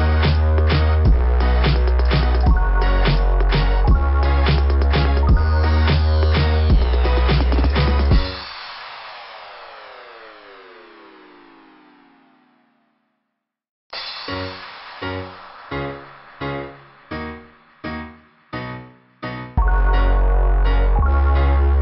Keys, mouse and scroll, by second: 1.4 click, 3.1 click, 3.4 click, 10.4 click, 10.7 click, 11.0 click, 14.0 scroll up 2, 16.5 scroll down 2, 17.0 ', 18.4 click, 21.0 scroll down 2.